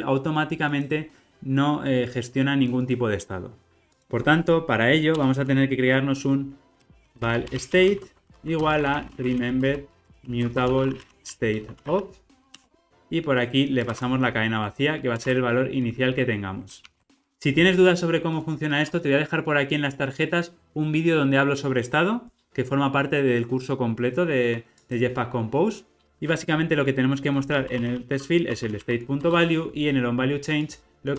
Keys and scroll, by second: 12.6 Return, 15.1 Return, 16.8 alt+super+l, 17.0 alt+Return, 29.2 Return.